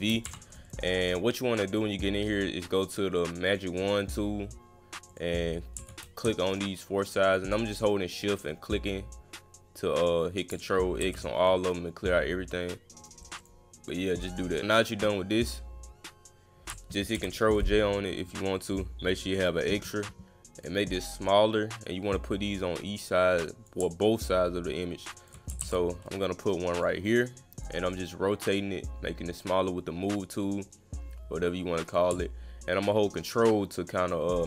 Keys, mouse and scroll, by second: 0.6 click, 1.5 click, 1.7 click, 2.3 click, 3.5 click, 5.1 click, 6.5 shift+click, 7.3 shift+click, 8.1 shift+click, 11.0 ctrl+x, 13.0 click, 13.2 click, 13.4 click, 13.9 click, 18.5 click, 19.3 click, 20.6 click, 20.8-22.1 drag, 22.3 click, 22.9 click, 24.3-25.3 ctrl+drag, 25.6 ctrl+z, 26.2 click, 27.1 click, 27.9 click, 30.6-31.9 drag, 32.9-34.4 ctrl+drag.